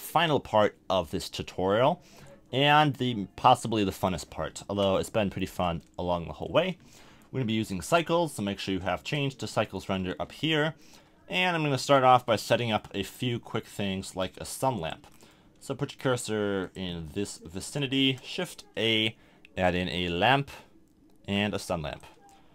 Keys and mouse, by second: 2.7-6.2 middle drag, 12.9 KP_7, 14.8-15.5 drag, 17.1-21.2 drag, 17.9 shift+a.